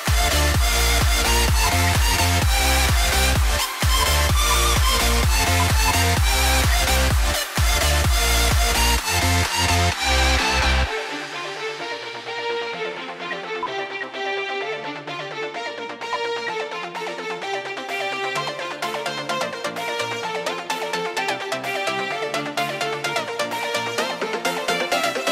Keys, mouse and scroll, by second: 1.7 shift+Page_Up, 4.2 shift+click, 6.0 shift+click, 6.5 typing, 10.2 typing, 13.2-13.8 typing, 13.6 shift+click, 15.0 double click, 16.3 ctrl+k, 20.5 right click.